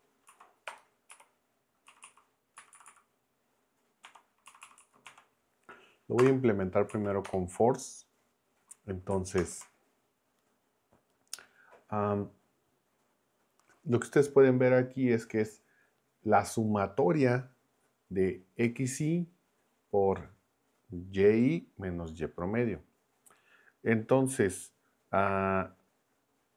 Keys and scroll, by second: 0.0-1.1 typing, 0.3 Right, 1.9 Right, 2.6 Left, 4.0 \, 4.4 Right, 5.0 \, 6.2 space, 6.9 Right, 7.3 BackSpace, 9.4 ctrl+Return.